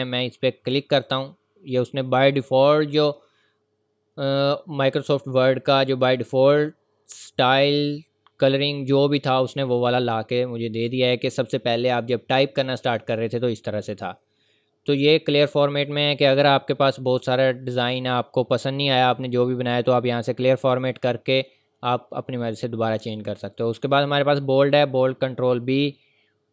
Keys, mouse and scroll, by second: 0.9 click.